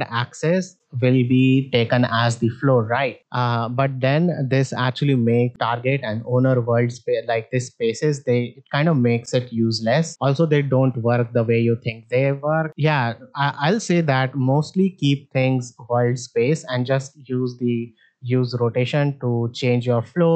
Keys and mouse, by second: 7.6-9.1 drag, 9.4 click, 10.6-11.1 middle drag, 11.7-12.7 drag, 13.4 middle click, 14.3 middle click, 19.8 middle click.